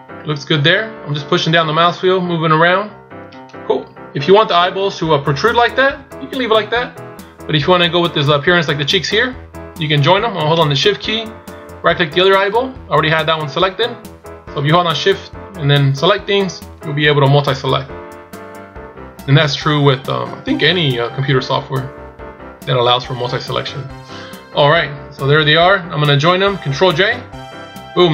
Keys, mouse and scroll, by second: 3.7 KP_1, 4.5 KP_7, 6.0 KP_1, 12.2 shift+right click.